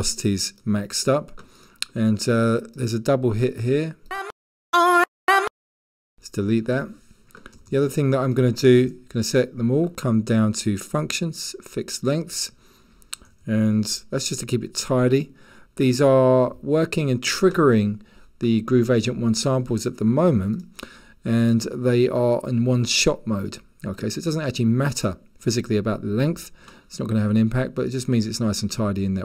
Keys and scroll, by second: 7.6 g, 7.7 g, 7.8 g, 13.3 g, 13.4 g.